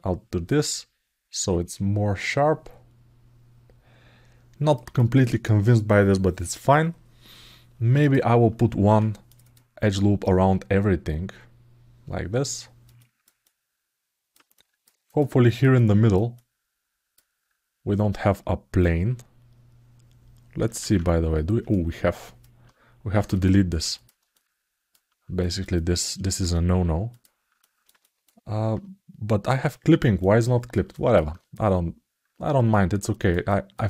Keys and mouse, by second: 0.4-4.5 alt+middle drag, 4.7 alt+shift+middle click, 7.8 click, 10.0-12.6 alt+middle drag, 12.7 alt+shift+middle click, 13.2 alt+middle click, 14.3 ctrl+alt+middle click, 14.8 alt+shift+middle click, 15.2 alt+middle click, 15.5 ctrl+alt+middle click, 16.1 alt+middle click, 20.6 alt+z, 21.5 alt+middle click, 23.7 shift+click, 24.1 alt+shift+middle click, 25.1 alt+middle click, 25.5 alt+shift+middle click, 27.4 alt+shift+middle click, 27.8 ctrl+alt+middle click, 29.9 alt+middle click, 30.7 alt+shift+middle click, 32.0 alt+z, 32.5 ctrl+alt+middle click, 33.2 alt+shift+middle click, 33.7 alt+middle click.